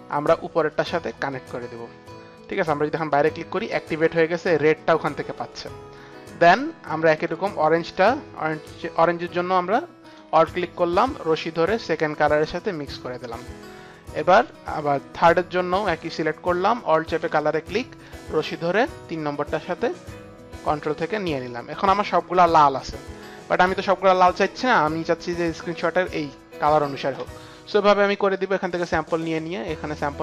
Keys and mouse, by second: 1.5 alt+click, 2.4 click, 3.3 click, 6.3 click, 7.1 click, 10.0 click, 10.1 alt+click, 11.3 alt+click, 11.4 alt+click, 13.1 alt+click, 13.2 alt+click, 14.3 click, 15.8 click, 17.3 alt+click, 18.7 alt+click, 22.7 click, 25.3 click, 28.0 click, 29.3 click, 29.7 click.